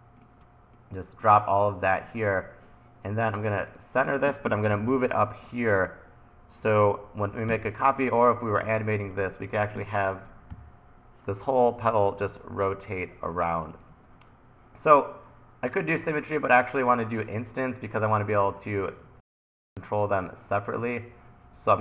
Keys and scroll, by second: 4.8 l, 7.5 r, 9.3 super+z, 10.5 l, 13.9 super+z, 19.1 super+z, 20.0 super+z.